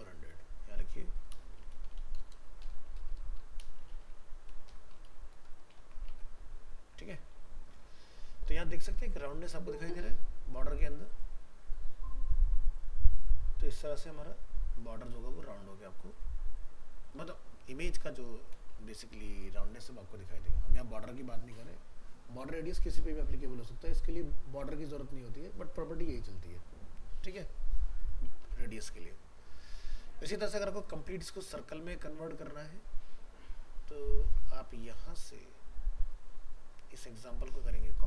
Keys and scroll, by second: 5.8 ctrl+s, 6.1 alt+Tab, 28.5 ctrl+w, 34.1 ctrl+w.